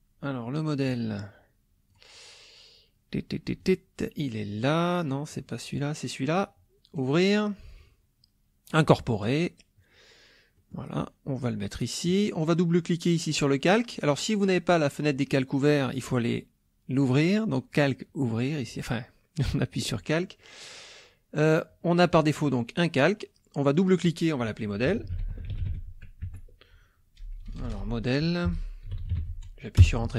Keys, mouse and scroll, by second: 1.9 click, 3.6 click, 5.7 click, 7.0 click, 8.7 click, 10.6 middle click, 10.6-10.9 scroll up 1, 11.4 click, 16.9 click, 19.7 click, 22.1 click, 23.7 click, 24.9 ctrl+a, 25.1 ctrl+m, 25.3 ctrl+o, 25.5 ctrl+d, 25.6 ctrl+e, 25.6 ctrl+l, 25.7 ctrl+e, 26.3 Caps_Lock, 27.2-29.6 typing, 29.8 Return.